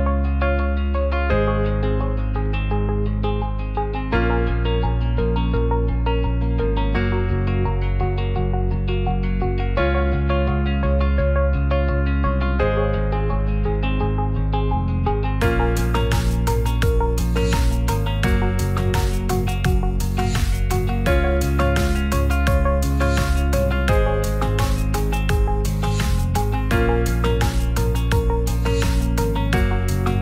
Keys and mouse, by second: 1.3 click, 1.6 e, 2.5 click, 3.3 middle click, 3.9 g, 3.9 z, 6.4 click, 9.8 Tab, 11.4 2, 11.6 click, 18.5 click, 21.1 ctrl+s, 24.2 shift+Tab, 25.7-28.2 drag.